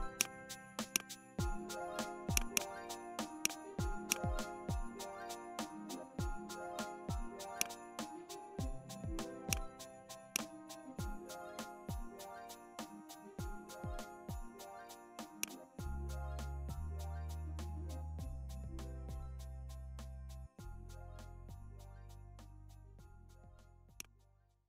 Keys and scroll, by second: 11.4 ctrl+d, 12.2 ctrl+s.